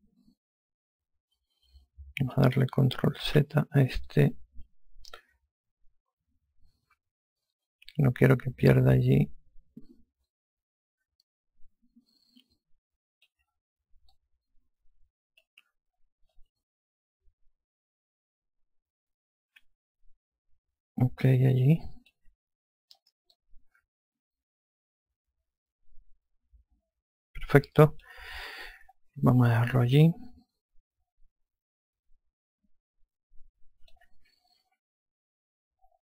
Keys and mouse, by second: 3.9 ctrl+z, 4.7 alt+click, 14.7 click, 16.9 alt+click, 23.9 alt+click, 30.0 alt+click, 35.2 F2.